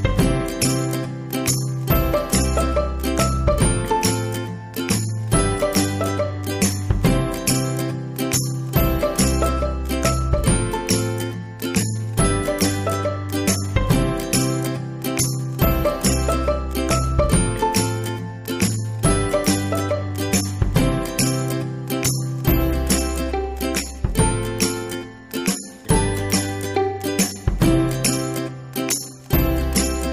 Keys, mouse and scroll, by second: 9.2-9.7 ctrl+scroll up 1, 10.2-13.4 middle drag, 13.4 ctrl+scroll down 1, 14.4 click, 18.2 click, 29.6 click.